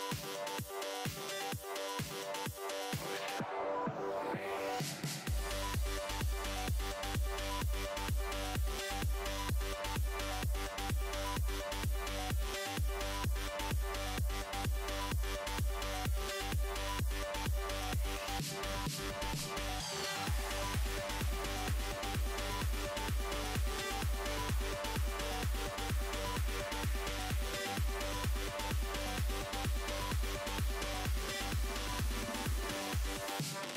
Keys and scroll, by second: 31.7 s.